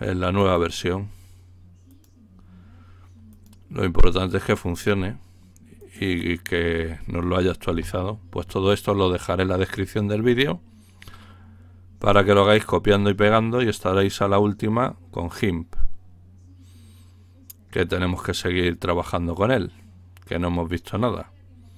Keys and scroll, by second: 7.8 Return.